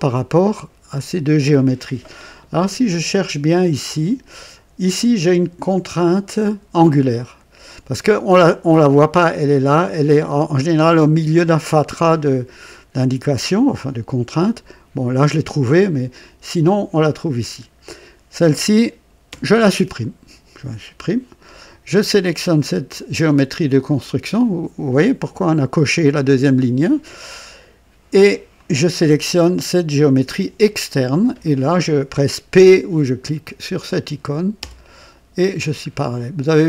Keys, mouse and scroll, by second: 3.6 scroll down 1, 10.1-10.6 scroll up 2, 17.3 click, 19.2 Delete, 22.4 click, 28.4 click, 34.5 p, 34.6 p, 35.3-35.7 scroll down 2, 36.2 scroll down 2.